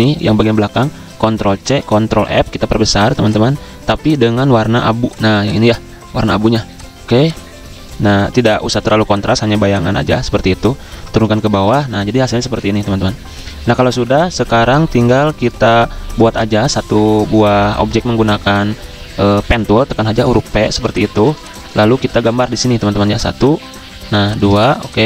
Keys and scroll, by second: 0.5 ctrl+z, 1.4 ctrl+c, 2.0 ctrl+f, 11.1 ctrl+[, 20.2 p.